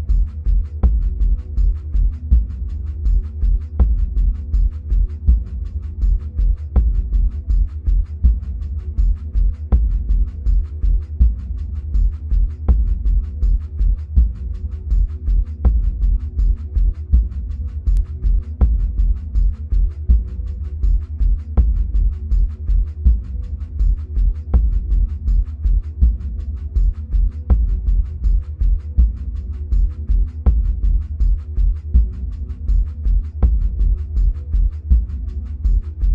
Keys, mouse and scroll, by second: 7.4-10.0 middle drag, 10.0-21.7 drag, 21.7-23.9 middle drag, 23.9-33.2 drag, 33.2-35.9 middle drag, 35.9-36.1 drag.